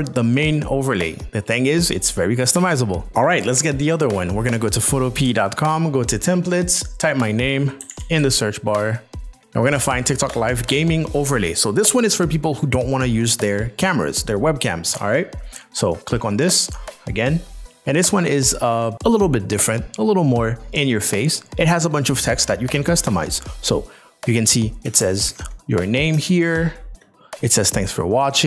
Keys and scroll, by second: 7.8 g, 7.9 a, 26.2 space.